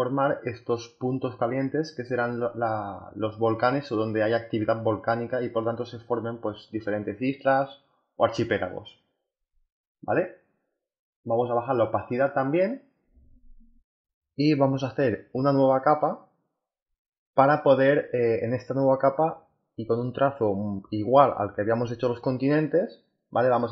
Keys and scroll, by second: 15.3 b, 18.6 8, 21.3 z, 23.3 b.